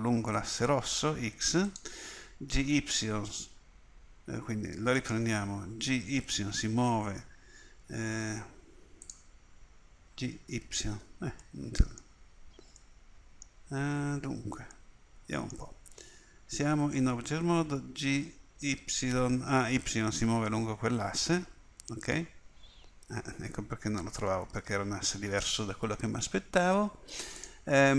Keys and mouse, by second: 2.5 g, 5.8 g, 10.1 g, 14.8-17.9 middle drag, 17.9 g.